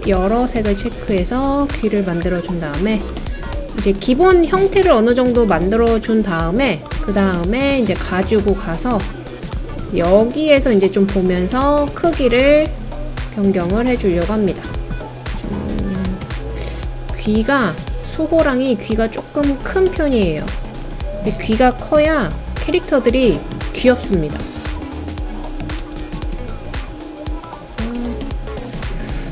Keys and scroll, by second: 25.8 Down, 26.0 Down, 26.3 Right.